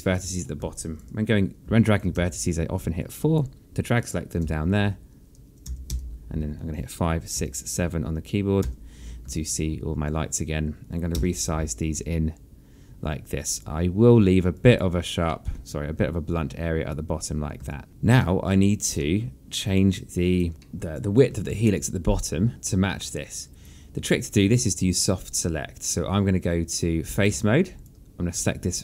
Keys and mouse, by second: 0.6 alt+click, 1.4 alt+click, 2.5 alt+click, 2.8 4, 3.7 click, 5.1-8.0 typing, 9.3 7, 10.1 alt+click, 11.8 r, 12.5 click, 15.2 alt+click, 16.0 alt+middle click, 17.9 alt+click, 18.9 alt+middle click, 19.3 alt+click, 19.7 alt+middle click, 20.4 click, 21.3 alt+middle click, 21.6 alt+click, 22.5 alt+click, 24.1 alt+click, 26.5 alt+middle click, 27.5 right click, 28.1 alt+click.